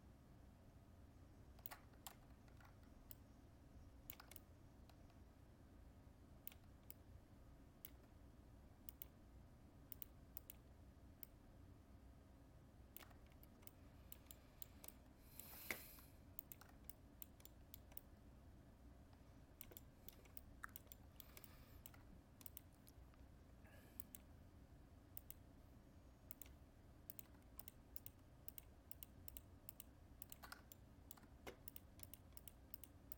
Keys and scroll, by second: 2.0 ctrl+z.